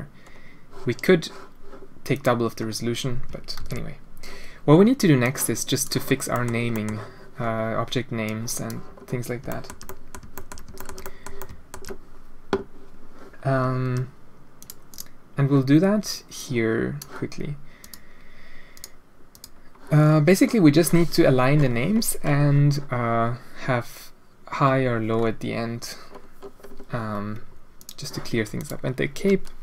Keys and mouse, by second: 2.1 click, 2.5 middle click, 3.5 alt+a, 5.2 click, 6.3 drag, 6.7 click, 8.2 click, 9.5 shift+middle drag, 9.8 middle drag, 10.3 shift+middle click, 10.7 shift+middle drag, 11.0 middle drag, 11.3-11.7 alt+shift+middle drag, 14.8 click, 16.3 click, 17.8 click, 18.7 click, 19.3 click, 27.8 click, 28.5 click.